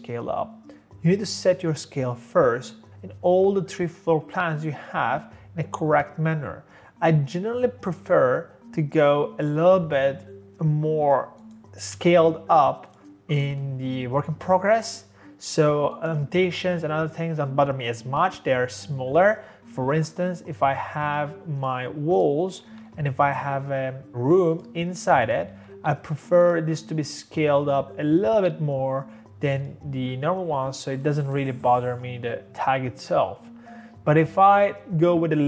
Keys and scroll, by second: 19.7-20.5 typing, 22.5 Escape, 22.6 Escape, 25.6 Escape, 25.7 Escape.